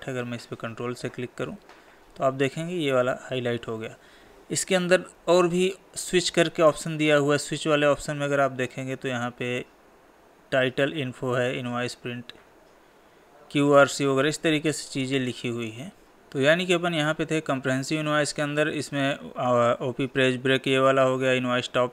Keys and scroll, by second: 4.3 Down, 15.2 Down.